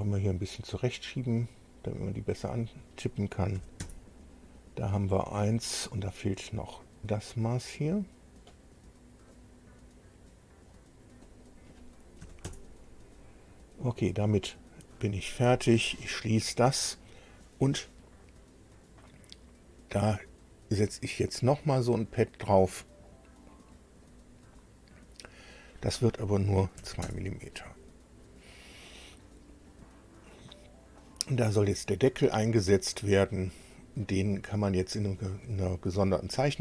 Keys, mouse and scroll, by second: 2.4 click, 3.5 KP_1, 3.8 KP_Enter, 9.3-10.8 drag, 11.2 click, 12.2 KP_1, 12.4 KP_Enter, 16.0 click, 24.0 click, 26.7 KP_2, 27.0 KP_Enter, 33.8-34.2 scroll down 2, 34.4 scroll up 2.